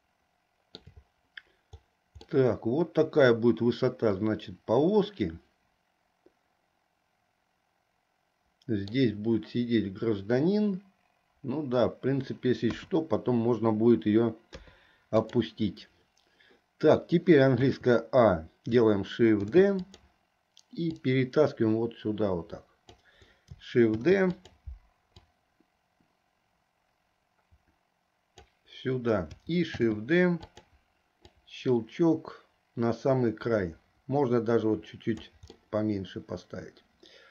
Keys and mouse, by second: 0.1 shift+middle click, 2.4-9.1 middle drag, 12.8 KP_2, 14.6 KP_3, 17.7 a, 19.5 shift+d, 21.2-23.0 drag, 24.0 shift+d, 25.4-28.5 drag, 29.9 shift+d, 31.4-35.4 drag, 35.7-37.3 middle drag.